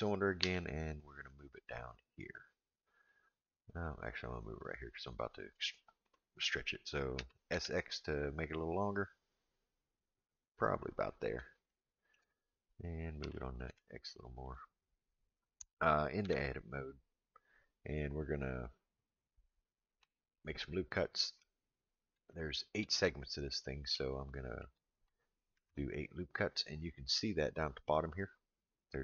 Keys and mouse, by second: 0.4 g, 7.2 s, 11.7-12.1 shift+middle drag, 13.2 g, 16.2 Tab, 22.3 shift+middle click, 24.1 shift+middle click, 25.5 ctrl+r.